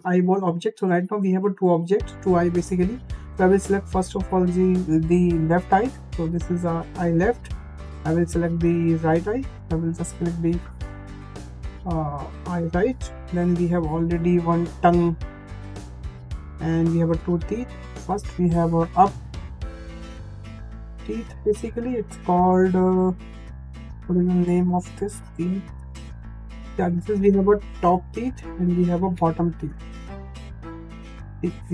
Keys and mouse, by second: 2.6 click, 3.7-7.0 drag, 7.5 click, 7.9-12.1 drag, 13.1-15.9 drag, 16.8 click, 17.5-27.8 drag, 28.3-31.7 drag.